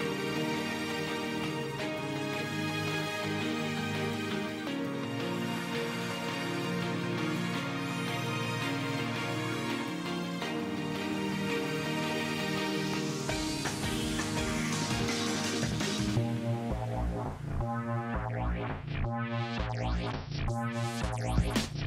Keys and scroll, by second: 10.1 space, 21.4 ctrl+space, 21.7 ctrl+space.